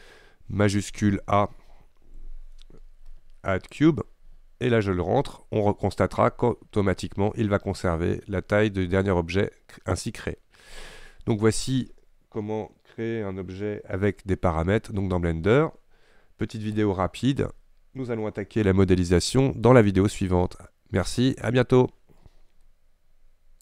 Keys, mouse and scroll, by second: 2.1 shift+a.